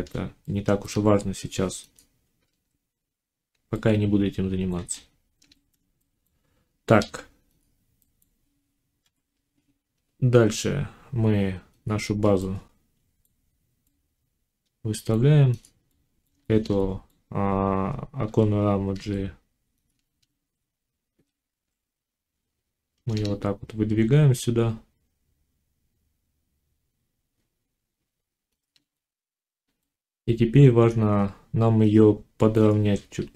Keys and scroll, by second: 0.7 Tab, 6.8 ctrl+s, 8.9 5, 18.1 g, 19.9 shift+Tab, 21.0 g.